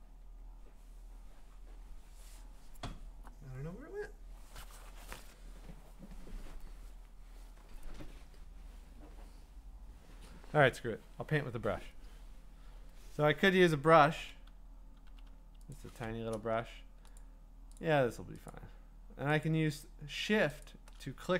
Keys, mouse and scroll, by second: 14.1 [, 15.0 ], 15.3 ], 15.7 click, 17.2 shift+click, 17.8 shift+click, 18.5 click, 19.4 click, 20.6 shift+click.